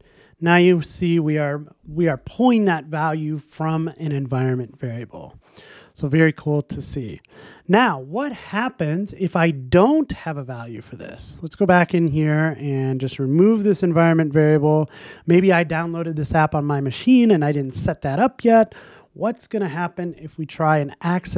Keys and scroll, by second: 5.4 shift+Escape, 19.0 super+s, 19.7 ctrl+r.